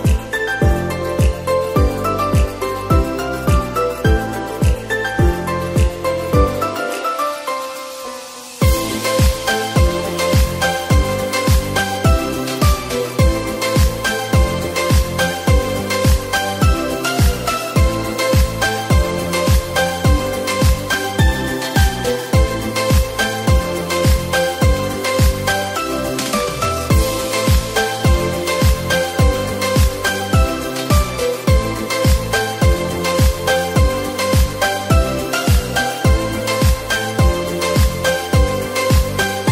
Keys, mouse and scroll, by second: 1.3 click, 4.2 click, 5.2-6.6 drag, 13.6-14.9 scroll down 2, 14.9-15.5 scroll down 1, 15.5-16.1 scroll down 1, 16.1-19.2 drag, 20.0 drag, 21.2 click, 23.6 click, 25.1-27.3 drag, 28.8-31.1 drag, 32.5-35.1 drag, 36.5-38.6 drag, 38.6-39.5 scroll down 3.